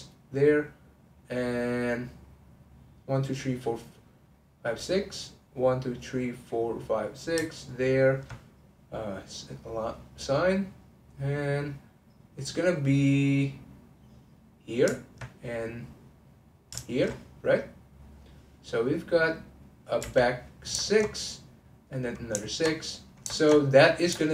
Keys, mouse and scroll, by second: 5.0-7.9 middle drag, 7.9 alt+click, 9.3 click, 9.9-15.0 middle drag, 15.0 alt+click, 15.3-16.9 middle drag, 16.9 alt+shift+click, 17.9 click, 19.0-20.0 middle drag, 20.0 3, 20.2 click, 20.8 ctrl+click, 21.6 click, 21.9 middle click, 22.5 ctrl+click, 22.8-24.3 middle drag.